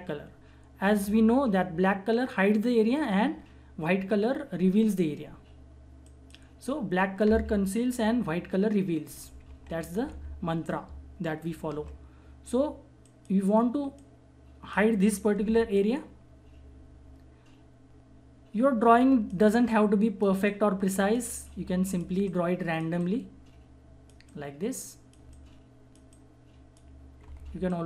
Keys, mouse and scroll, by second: 6.0 click, 9.0-10.7 typing, 11.6 ctrl+=, 13.0-15.3 drag, 15.7 click, 15.7-27.2 drag, 27.2 [, 27.4 [, 27.7-27.8 drag.